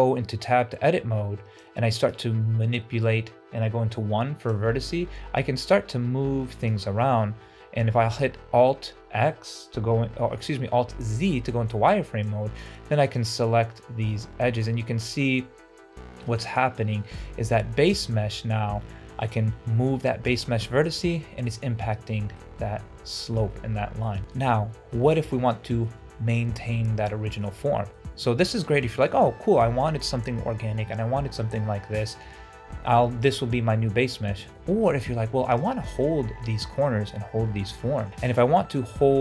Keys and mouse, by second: 1.5 click, 3.7 1, 4.4-6.6 drag, 6.8 ctrl+z, 7.3 alt+z, 12.2 click, 13.1-17.7 drag, 17.9 Tab, 21.8 middle click, 22.6 Tab, 23.1 alt+z, 23.4 middle click, 24.3 KP_Divide, 24.3 Tab, 24.8 shift+middle drag, 25.3-25.7 middle drag, 27.6 middle click, 28.8 shift+middle drag, 34.5 shift+middle drag, 36.9-37.5 middle drag, 37.7 shift+middle drag, 38.2 shift+d, 38.7 Tab, 39.0 middle click.